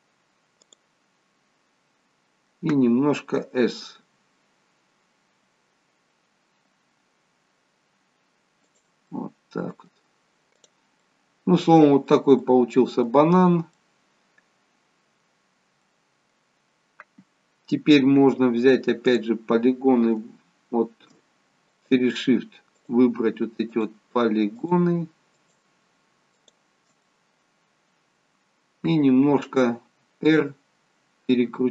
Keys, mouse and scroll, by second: 1.4 middle click, 4.0 s, 9.1 middle click, 10.6 click, 11.0 middle click, 13.9 middle click, 15.5-15.9 scroll down 2, 15.9 middle click, 19.1 click, 21.8 shift+click, 27.0 shift+click, 27.1 middle click, 29.8 scroll up 2, 30.4 middle click.